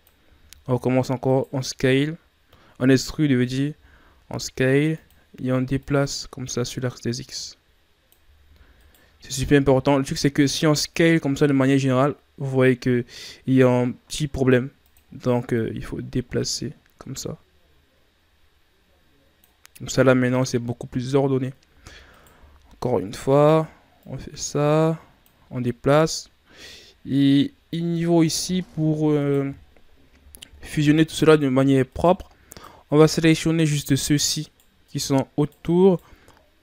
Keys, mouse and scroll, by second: 5.8-8.4 drag, 8.4 e, 15.5-18.6 drag, 19.9-21.2 middle drag, 21.2-21.7 scroll up 2, 21.7 e, 23.9-25.6 drag, 25.6 middle click, 26.0-26.9 scroll up 3, 26.9 shift+scroll up 4, 29.1 right click, 31.2 right click, 31.8 shift+right click, 32.5 shift+right click, 33.1 right click, 33.8 shift+right click, 34.4 shift+right click, 34.8 shift+right click, 35.3 shift+right click, 35.8 shift+right click.